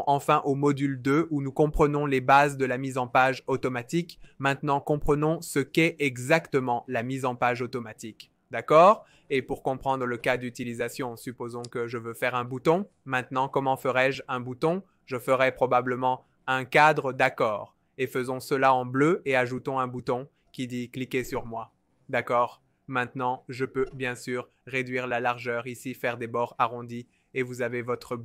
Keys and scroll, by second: 8.8 f, 15.9 t, 16.9-18.5 typing, 19.6 alt+v, 19.8 alt+h, 21.3 v, 25.5-26.8 typing.